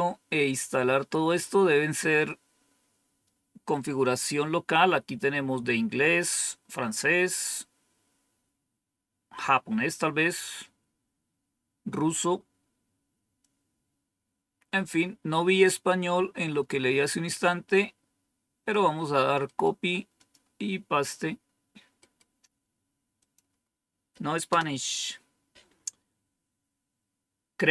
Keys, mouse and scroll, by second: 6.4-7.1 scroll down 1, 7.1 scroll down 1, 8.0-8.8 scroll down 1, 8.8-10.1 scroll down 1, 10.1-10.9 scroll down 1, 10.9-13.3 scroll down 1, 13.3-18.7 drag, 19.5 right click, 20.1 click, 23.1 click, 24.4 Return.